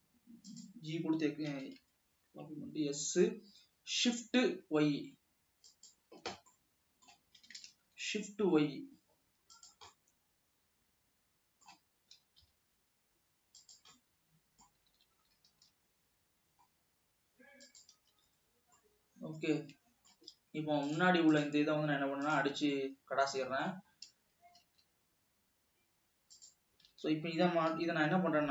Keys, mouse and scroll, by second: 1.8 s, 6.6 scroll down 1, 6.8 middle click, 7.7 s, 10.2-12.4 middle drag, 12.4 g, 14.4 middle click, 15.3 alt+a, 15.8 ctrl+r, 19.2-21.2 middle drag, 21.2 click, 21.6 click, 22.0 x, 23.1-24.1 middle drag, 24.1-24.8 scroll up 1, 25.1 alt+a, 26.7-27.3 drag, 27.3 alt+a, 28.2 l.